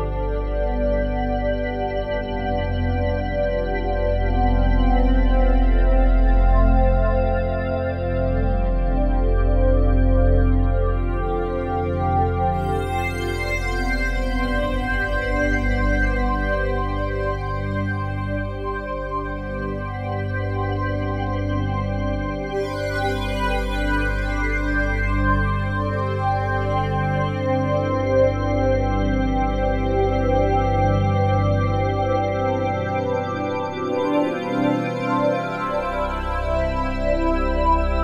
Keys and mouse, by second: 0.1 click, 0.5 click, 0.8 click, 3.1 click, 5.4-7.6 drag, 8.5 ctrl+s, 10.7-21.5 drag, 21.5 ctrl+s, 23.2 n, 24.9-32.5 drag, 33.5-38.0 drag.